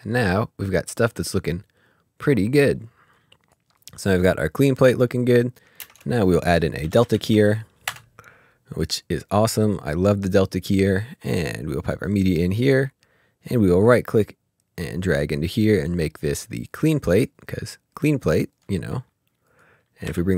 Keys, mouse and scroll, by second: 3.1 click, 5.8 ctrl+space, 7.0 typing, 7.9 Return, 9.0 click, 11.3 click, 13.8 click, 13.9 right click, 16.7 right click, 17.0 click, 18.7 click, 20.0 typing.